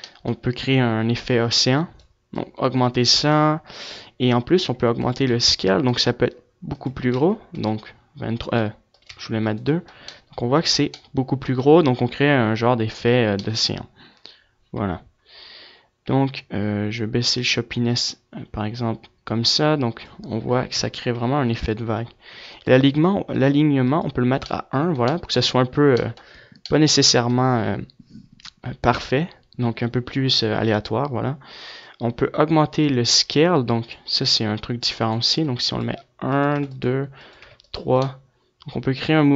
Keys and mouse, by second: 0.5-3.2 drag, 3.8-7.4 drag, 7.8-9.7 drag, 13.9-15.9 middle drag, 15.9-19.2 drag, 19.2 KP_0, 20.9-22.3 middle drag, 22.3 click, 25.4-29.9 middle drag, 30.0-31.8 drag, 33.8-37.7 drag.